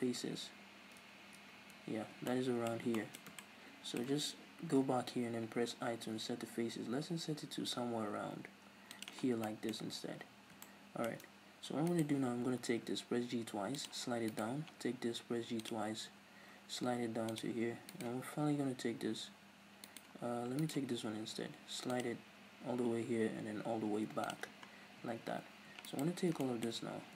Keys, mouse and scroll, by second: 5.5 click, 5.5 right click, 9.2 scroll down 2, 9.4-11.9 middle drag, 9.8-10.7 scroll up 2, 11.9 right click, 12.7 g, 13.9 click, 14.3 right click, 14.7 g, 15.7 click, 15.9 g, 17.4 click, 17.9 right click, 18.6 g, 20.0 right click, 20.6 right click, 21.1 g, 24.4 click, 24.5 Tab, 24.7 scroll down 1, 25.0 Tab, 25.1 scroll up 1, 25.9 alt+right click, 26.4-27.1 shift+middle drag, 26.9 scroll down 1.